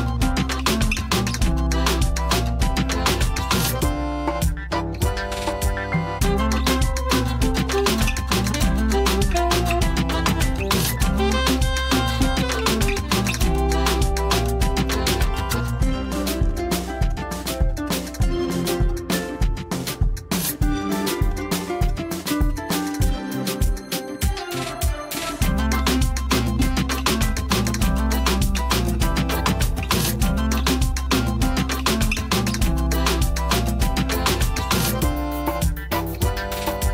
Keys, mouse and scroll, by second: 0.1 click, 0.2 space, 0.5 ctrl+click, 2.5 alt+i, 2.6 alt+a, 2.9 c, 3.3-4.0 scroll up 1, 4.0-5.3 scroll down 1, 5.3 click, 7.3-10.2 scroll up 1, 10.2 space, 11.0 ctrl+l, 12.5 click, 14.0 space, 14.2 right click, 14.4 click, 14.9 space, 15.2 ctrl+click, 16.2-16.5 click, 17.8 j, 19.9-21.1 drag, 21.5-21.8 click.